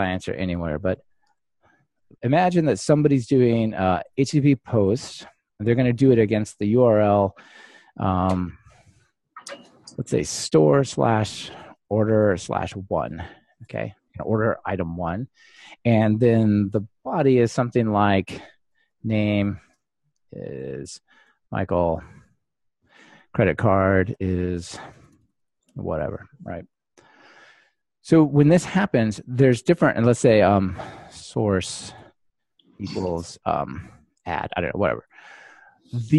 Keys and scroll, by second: 0.9 super+c, 1.7 super+v.